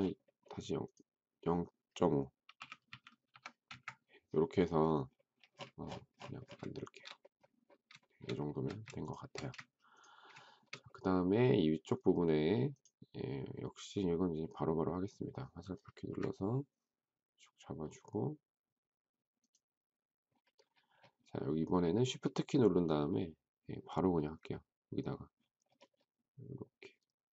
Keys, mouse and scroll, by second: 2.2-3.7 typing, 6.7 shift+middle click, 8.0 shift+middle click, 8.2 shift+middle click, 9.3 space, 10.4 shift+middle click, 16.0 Up, 22.3 shift+middle click, 22.9 shift+scroll up 1, 25.3-25.7 shift+scroll up 1.